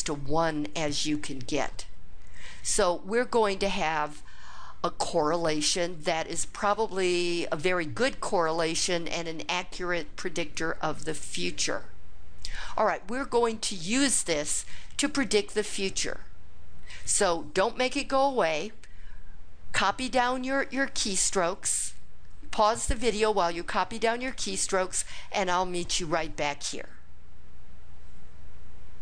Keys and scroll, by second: 28.1 Return.